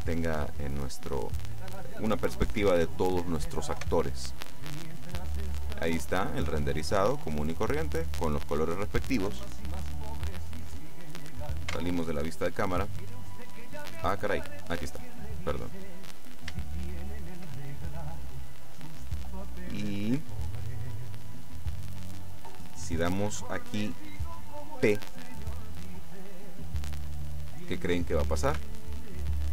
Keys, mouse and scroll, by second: 3.8 F12, 9.3 Escape, 11.8 KP_0, 13.4-13.9 scroll up 2, 13.9-14.9 scroll down 2, 15.3 middle click, 16.2-17.2 scroll up 3, 17.7 shift+middle click, 18.9 middle click, 20.8-21.3 scroll up 1, 28.6 p.